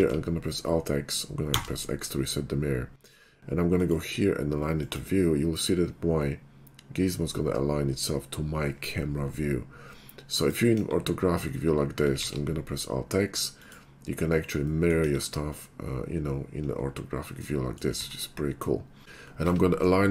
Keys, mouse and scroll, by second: 0.1 alt+x, 1.5 x, 3.8 click, 4.9 click, 10.4 right click, 12.3 alt+x, 13.6 click, 14.8 middle click, 15.6-17.9 middle drag, 18.0 ctrl+z.